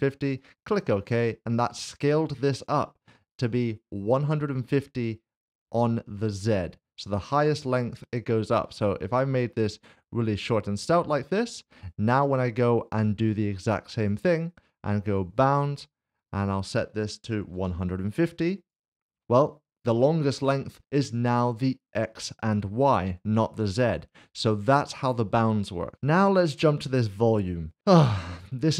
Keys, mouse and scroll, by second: 0.4 click, 3.3 click, 8.7 click, 13.9 click, 17.4-17.7 typing, 18.6 click, 25.9 Delete, 26.6 click.